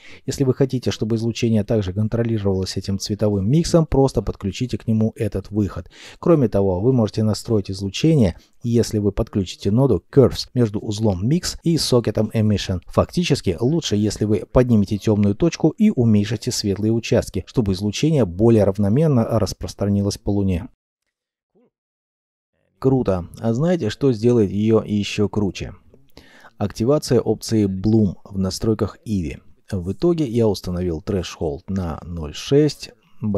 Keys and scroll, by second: 6.0 c, 6.6 u, 6.8 r, 28.5 ., 28.6 6, 28.8 Return, 31.3 ., 31.4 2, 31.5 Return.